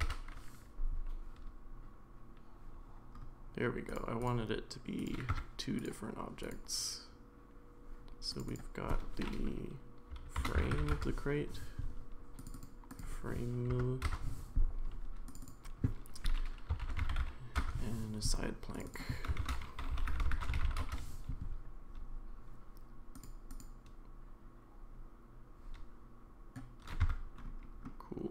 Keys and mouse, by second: 5.3 Tab, 6.5-8.4 drag, 8.5-11.8 drag, 12.4 click, 12.5-14.7 drag, 15.4-18.3 drag, 18.7 click, 18.9-21.3 drag, 27.0 Tab.